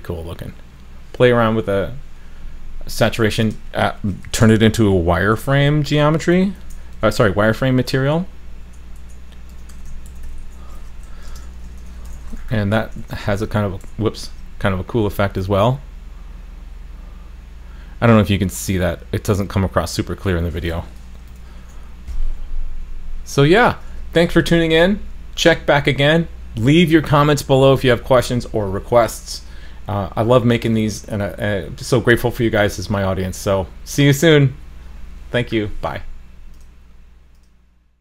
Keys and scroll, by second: 13.0 super+s, 14.3 super+s, 21.3 super+/, 21.6 super+s.